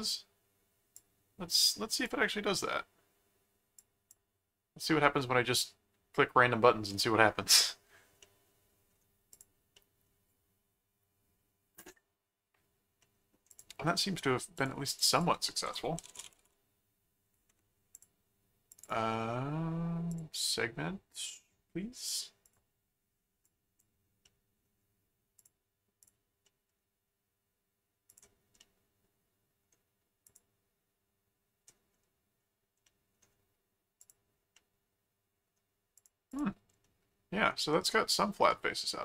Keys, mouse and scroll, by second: 0.9 click, 3.7 click, 8.2 middle click, 9.3 click, 9.7 middle click, 13.0 middle click, 13.5 click, 13.8 middle click, 14.5 click, 15.1 click, 15.4-17.0 typing, 17.9 click, 18.7 click, 18.8 right click, 20.1 click, 21.3 middle click, 22.0 click, 23.4 click, 24.2 middle click, 25.4 click, 26.0 click, 26.4 middle click, 28.1 click, 28.6-29.6 middle drag, 30.3 click, 32.8 middle click, 34.0 click, 34.5 middle click, 35.9 click, 36.8-38.5 middle drag.